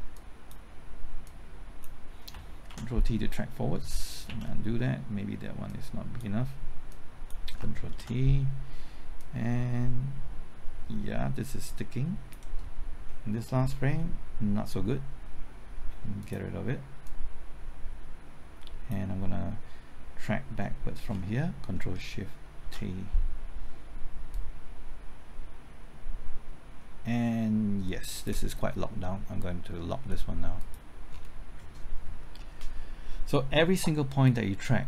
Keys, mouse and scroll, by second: 2.7 ctrl+t, 4.3 ctrl+z, 5.7-7.6 drag, 7.9 ctrl+t, 9.2-13.1 drag, 13.2 Right, 13.9 typing, 16.2-19.1 drag, 20.5 Left, 21.6 typing, 22.6 ctrl+shift+t, 24.3-29.1 drag, 31.1-34.2 scroll down 1, 34.2-34.8 drag.